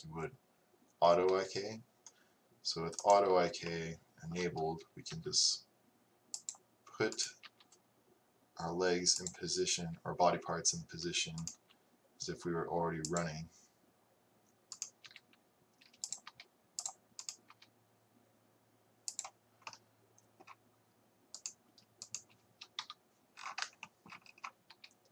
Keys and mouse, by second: 3.7-5.9 drag, 7.2-9.2 right drag, 7.5 g, 11.5-14.8 right drag, 15.0-16.6 drag, 15.1 g, 16.3 r, 17.4 middle click, 17.7-20.1 drag, 17.7 r, 21.4 right click, 22.9 KP_3, 23.6 middle click, 24.1 middle click, 24.8 r.